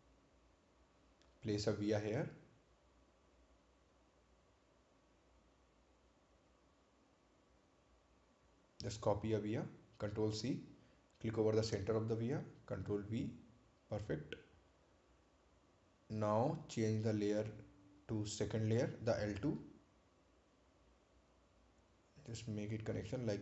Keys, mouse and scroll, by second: 3.2 right click, 4.3 scroll down 1, 5.4 right click, 6.1 click, 9.3 click, 12.4 ctrl+c, 13.1 click, 14.7 ctrl+v, 15.5 click, 16.7 scroll down 1, 20.2 click.